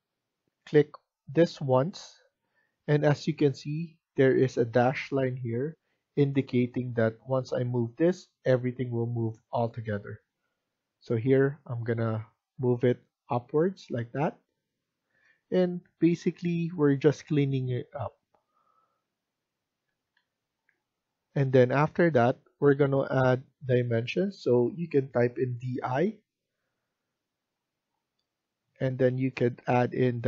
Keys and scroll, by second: 19.8 Escape, 20.1 Escape, 25.3-25.9 typing.